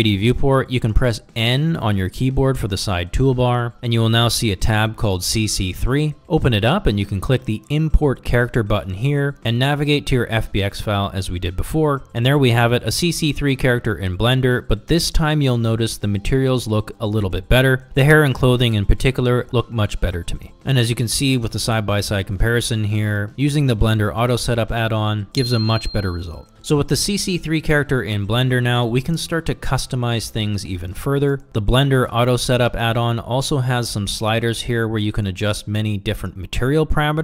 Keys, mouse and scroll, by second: 3.8 n, 7.7 click, 14.0 click, 15.3 shift+middle drag, 15.9 click, 17.3 shift+middle click, 17.7 shift+middle drag, 18.4-18.7 ctrl+middle drag, 19.0 shift+middle drag, 19.5-22.2 middle drag, 22.4 middle click, 23.0 ctrl+middle click, 23.8 middle click, 24.2 middle click, 24.7 middle click, 25.4-27.7 middle drag, 28.6 middle click, 28.7 shift+middle click, 28.8 ctrl+middle drag, 29.2 shift+middle click, 29.3 ctrl+middle drag, 30.6 click, 33.9-35.3 drag, 35.7 click, 36.5 click.